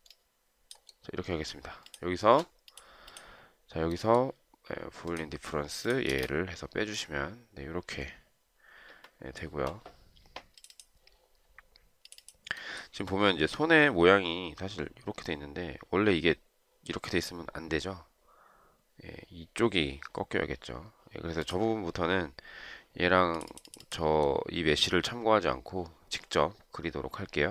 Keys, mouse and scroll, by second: 6.4 space.